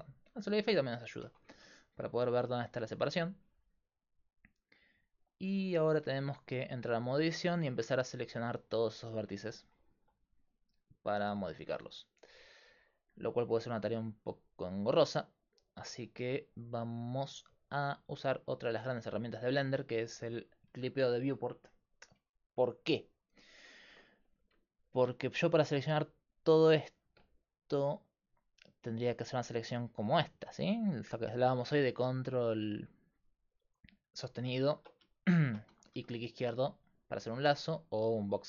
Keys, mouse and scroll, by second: 1.3 Tab, 5.5 Tab, 9.0-12.1 middle drag, 18.1-21.1 middle drag, 25.1 middle click, 25.8 middle click, 27.4-29.3 right drag, 28.1-33.8 drag, 30.6 a, 35.9-37.3 drag, 35.9 a, 37.7 a.